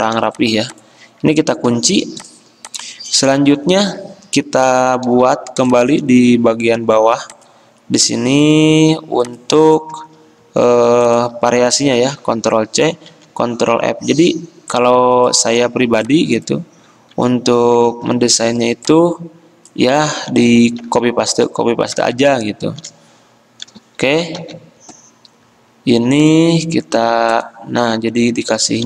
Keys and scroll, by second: 1.8 ctrl+2, 8.2 a, 12.5 ctrl+c, 13.3 ctrl+f, 17.1 ctrl+z, 18.3 ctrl+2, 20.3 ctrl+z, 21.0 ctrl+z.